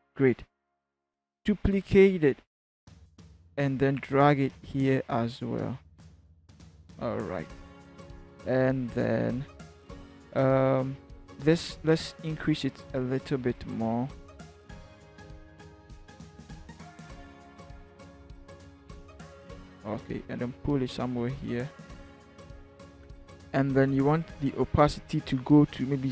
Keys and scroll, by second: 1.6 ctrl+j, 2.1 ctrl+v, 11.8 ctrl+t, 22.6 Return.